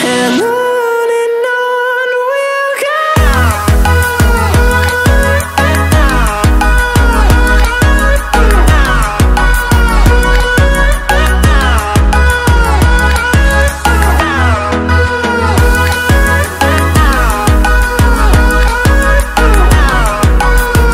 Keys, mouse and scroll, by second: 0.0 alt+e, 0.8 click, 3.0 click, 3.4 middle click, 16.5 F8, 18.1 F8, 19.8 click.